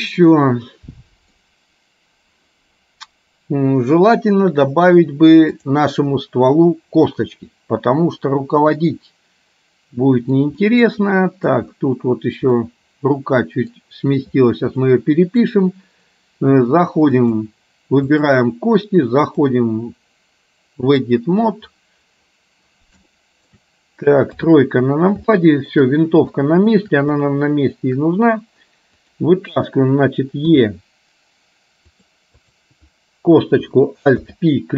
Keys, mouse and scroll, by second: 0.6 middle click, 5.8 click, 9.0-10.5 middle drag, 10.7 middle click, 12.7-13.8 middle drag, 15.0 middle click, 17.3 click, 18.3 click, 19.5-21.2 drag, 23.2 shift+middle click, 24.5 KP_3, 25.5 middle click, 26.5 middle click, 27.3 shift+middle click, 30.6 e, 34.2 alt+p.